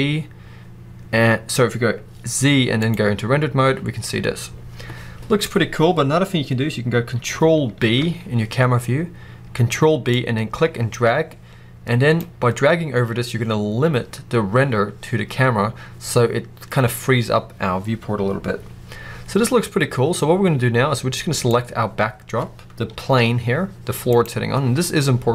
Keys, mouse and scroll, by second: 7.7 ctrl+b, 9.5 click, 9.5 middle click, 9.5 right click, 21.2 click, 22.7 g, 24.2 right click.